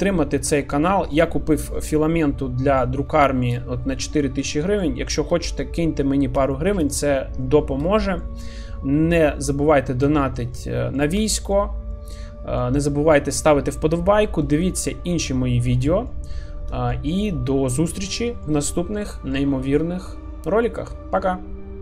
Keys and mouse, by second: 2.3-2.8 middle drag, 3.2 shift+middle drag, 3.6 middle click, 4.5 shift+middle click, 4.8 middle click, 5.4 shift+middle click, 6.5 shift+middle click, 6.9-7.4 middle drag, 7.9 shift+middle drag, 8.4-9.9 middle drag, 10.2 shift+middle drag, 10.5-11.0 middle drag, 11.3 shift+middle click, 12.0 middle click, 14.6-15.7 shift+middle drag, 16.1 middle click, 16.9-17.2 shift+middle drag, 17.5 middle click, 18.3 shift+middle click, 19.0 middle click.